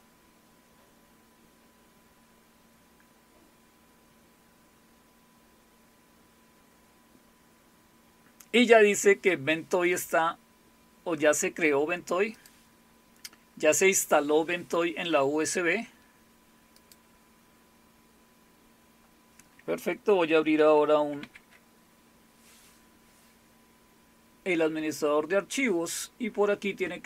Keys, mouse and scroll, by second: 12.3 click, 16.8 click, 21.2 alt+super+f.